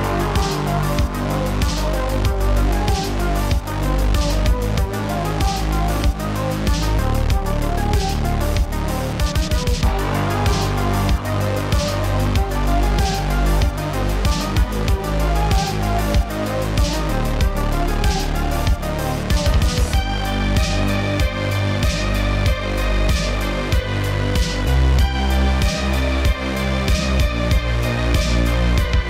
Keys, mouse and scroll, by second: 4.2 click, 5.2-6.2 middle drag, 6.2 shift+a, 9.1 click, 10.1-11.9 drag, 12.6 shift+d, 13.4 click, 14.3-17.6 drag, 17.6 shift+d, 20.0 click, 21.0-22.8 drag, 24.0 ctrl+g, 24.9 click, 25.1-25.5 middle drag, 25.5 click, 26.5 Tab, 26.8 click, 27.1 click, 27.7 click, 27.9 scroll down 5, 28.0-28.7 middle drag, 28.7 scroll down 1, 28.7 middle click.